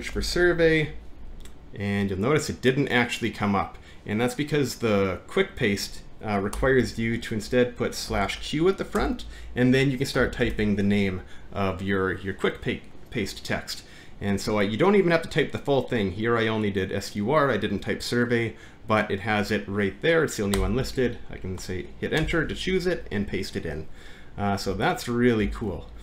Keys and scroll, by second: 20.6 Return, 22.2 ctrl+v, 24.6 Home, 25.4 Up.